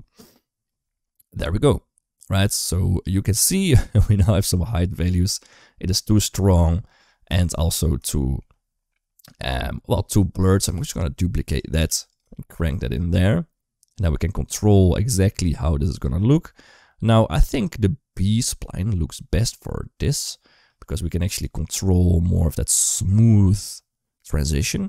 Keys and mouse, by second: 5.1 shift+middle click, 7.3 shift+middle click, 8.0 shift+middle click, 10.2 click, 10.5 shift+d, 11.6 g, 12.2 shift+middle click, 13.9-15.2 drag, 15.8-16.9 drag, 17.2-18.3 drag, 20.7-24.8 drag.